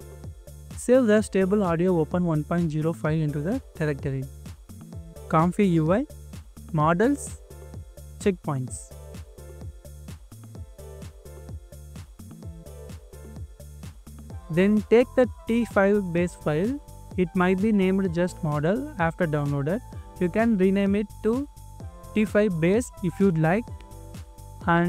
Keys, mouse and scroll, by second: 1.5 double click, 3.9 double click, 5.0-6.8 scroll down 1, 6.8 double click, 8.8 right click, 13.8 double click, 22.9 double click.